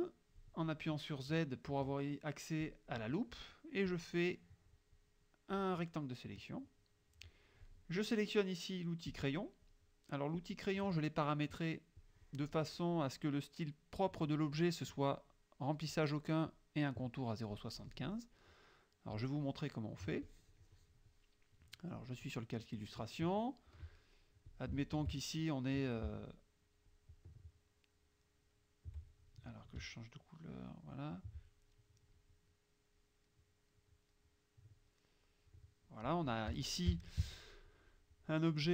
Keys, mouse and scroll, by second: 2.7 click, 4.0-5.8 drag, 6.2 middle click, 9.2 click, 10.4 click, 12.1 click, 19.2 click, 20.3 click, 22.0 click, 22.8 click, 24.5 shift+click, 27.0 shift+click, 28.3 shift+click, 30.8 shift+click, 32.8 right click, 34.2 right click, 35.3 click, 36.5 F1, 37.4 click.